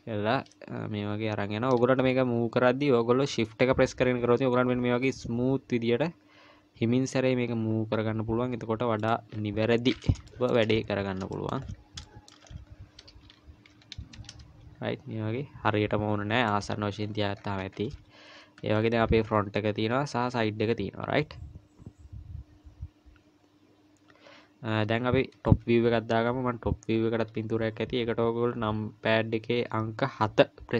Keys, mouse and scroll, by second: 9.6-11.2 scroll up 7, 10.3 shift+middle click, 11.2-12.0 scroll up 6, 11.3 shift+middle click, 12.0 shift+middle click, 12.4-13.3 scroll up 2, 13.3-13.7 scroll up 1, 13.7 g, 17.0-18.0 scroll down 14, 18.6 KP_1, 19.3-19.8 scroll down 2, 19.8 KP_3.